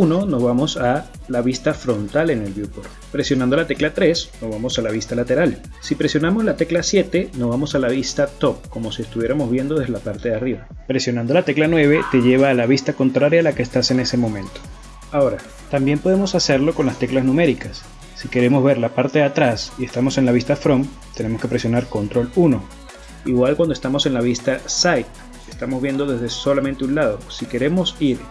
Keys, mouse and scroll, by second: 0.0 KP_1, 2.6 KP_3, 6.8 KP_7, 9.0 KP_9, 16.2 KP_1, 17.6 scroll down 4, 18.0 scroll up 4, 18.1 scroll down 6, 18.4-18.9 scroll up 4, 18.9 KP_1, 20.9 ctrl+KP_1, 23.6 KP_3.